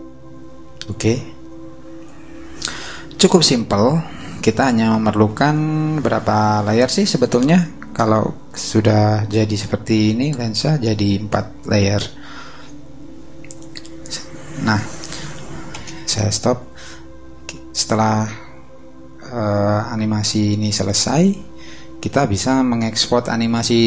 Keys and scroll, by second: 15.8 space.